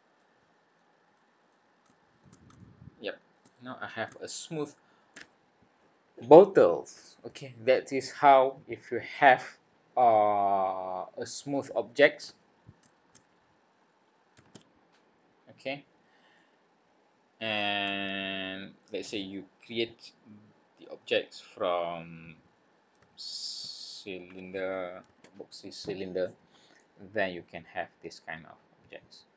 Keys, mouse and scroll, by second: 0.1 middle click, 1.1 middle click, 1.8 middle click, 2.5 shift+middle click, 3.6 scroll up 2, 4.2 shift+middle click, 16.3 middle click, 18.0 shift+middle click, 27.2 middle click.